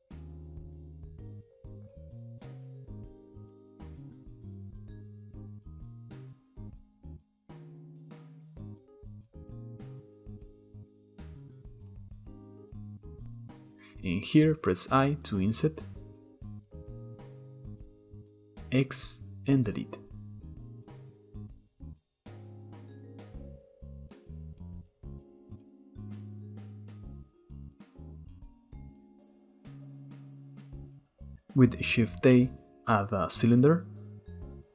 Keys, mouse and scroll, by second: 0.2 shift+middle click, 0.4 click, 0.7 click, 1.1 shift+middle click, 1.4 click, 1.6 shift+click, 2.4 shift+middle click, 2.8 click, 3.1 click, 4.2 shift+middle click, 4.9 click, 5.5-5.9 shift+middle drag, 5.9 click, 7.2 click, 7.8 click, 8.3-8.7 shift+middle drag, 8.7 click, 8.9 click, 9.6-12.0 middle drag, 12.0 click, 12.1 click, 12.3-14.9 shift+middle drag, 14.9 i, 19.4 x, 20.8-21.5 middle drag, 21.5 KP_7, 21.7 Tab, 22.0-22.4 shift+middle drag, 22.4 j, 22.6 k, 24.9 click, 25.1 z, 25.6 x, 25.9 scroll down 2, 26.0 Tab, 26.4-26.7 middle drag, 26.7 scroll down 1, 26.8 shift+middle click, 27.0 click, 27.2-27.7 middle drag, 27.7 click, 27.9 Tab, 28.4 click, 29.0 Tab, 29.6-30.8 shift+drag, 30.9 middle click, 31.6-32.8 shift+middle drag, 32.8 shift+a.